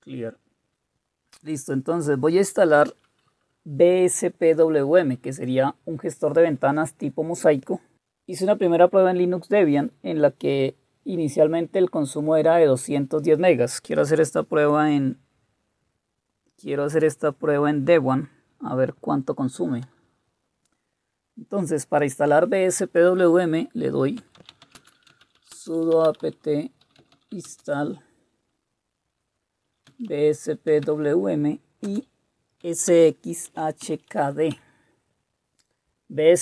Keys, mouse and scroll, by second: 0.0-0.1 typing, 24.1-27.8 typing, 29.4-34.5 typing.